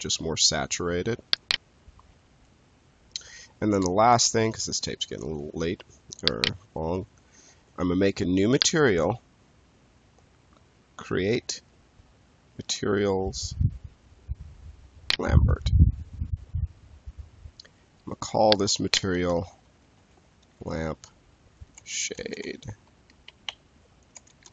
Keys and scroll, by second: 2.0 space, 19.6-22.8 typing, 24.0-24.5 typing.